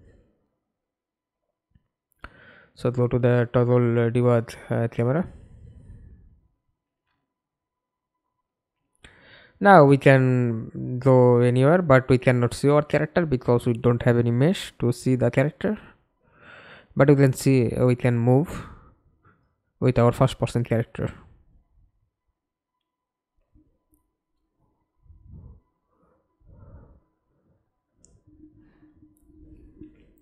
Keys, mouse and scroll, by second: 0.0-0.1 typing, 2.1-5.2 typing, 6.3-9.0 typing, 9.3 Return, 10.3-14.2 typing, 15.3 d, 16.4 Escape, 16.9 middle click, 17.4-17.9 scroll down 3, 17.9 middle click, 19.5 F11, 24.3 middle click, 26.8 middle click, 29.8 alt+F9.